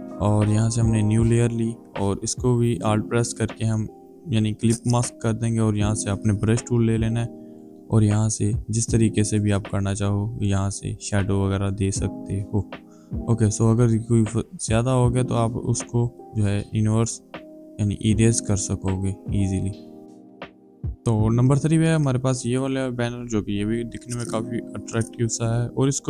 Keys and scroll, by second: 5.4 b, 7.7 space, 14.6 e, 15.3 b, 17.4 e.